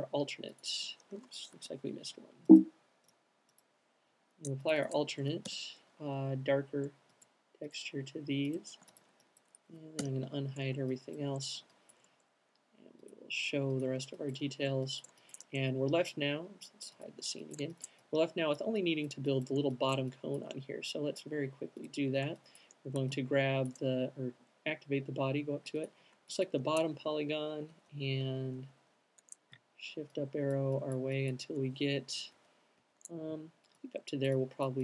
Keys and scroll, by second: 1.3 q, 1.6 Escape, 4.0 shift+m, 8.9 q, 9.8 u, 27.6 alt+shift+fn+Up, 28.0 alt+shift+fn+Up, 28.3 alt+shift+fn+Up, 28.5 alt+shift+fn+Up, 28.8 alt+shift+fn+Up, 29.0 alt+shift+fn+Up, 32.4 shift+fn+Up, 32.9 shift+fn+Down.